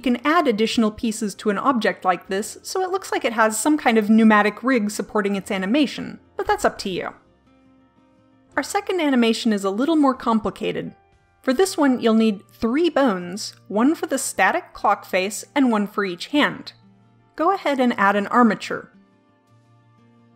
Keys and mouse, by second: 19.1-20.3 drag.